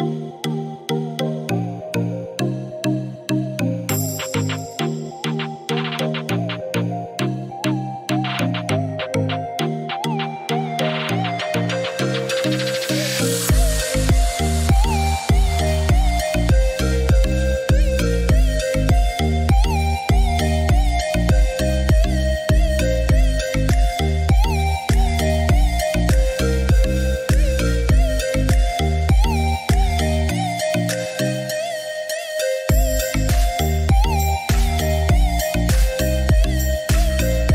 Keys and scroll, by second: 11.4 1, 11.9 5, 14.5-15.4 typing, 15.6 Return, 23.4 ctrl+8, 32.2 Escape.